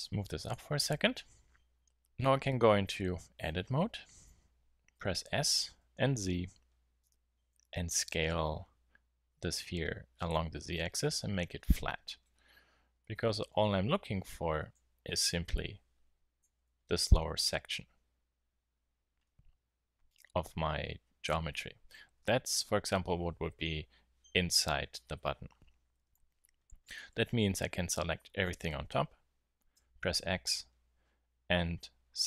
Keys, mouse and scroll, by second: 0.5-1.0 drag, 2.9 Tab, 5.5 s, 13.7 z, 14.5 a, 14.9 b, 18.9 middle click, 21.9 KP_1, 22.7 KP_3, 26.7 a, 26.7 b, 29.8 x.